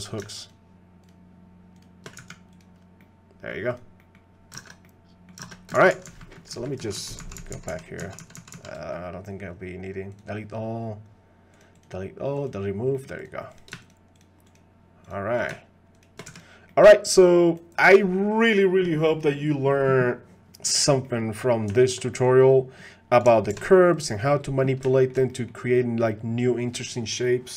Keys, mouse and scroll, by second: 0.5 shift+click, 2.2 x, 3.0 middle click, 3.7 click, 4.0 middle click, 4.7 ctrl+Tab, 4.8 click, 5.0 middle click, 5.5 ctrl+Tab, 5.9-6.8 ctrl+z, 7.0 ctrl+z, 7.2 ctrl+z, 7.5 ctrl+z, 7.7 ctrl+z, 8.0 ctrl+z, 8.4 ctrl+z, 8.5 ctrl+z, 10.1 click, 11.9 click, 12.9 middle click, 13.2 click, 13.5 click, 13.8 shift+click, 14.2 shift+click, 14.5 shift+click, 15.9 shift+click, 16.7 middle click, 16.7 x, 21.0 middle click, 21.7 shift+drag, 22.1 middle click, 23.5 alt+h, 24.2 middle drag, 25.0 shift+middle click, 25.3 middle click.